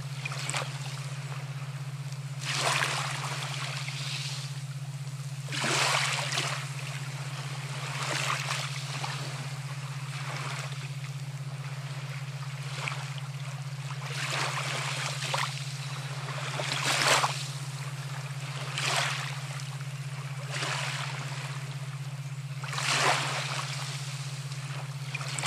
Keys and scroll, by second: 16.1 space, 16.6 x, 17.8 x, 21.1 space, 22.1 ].